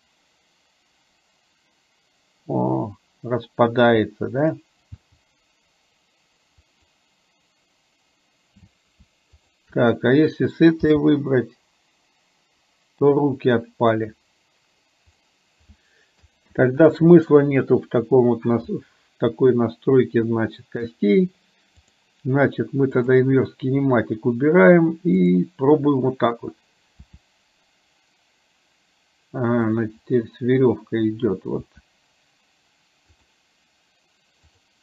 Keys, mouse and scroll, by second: 5.1 g, 9.4 shift+click, 10.9 g, 16.6 ctrl+z, 21.9 click, 23.2 click, 25.3 click, 27.1 r, 31.7 r, 34.6 click.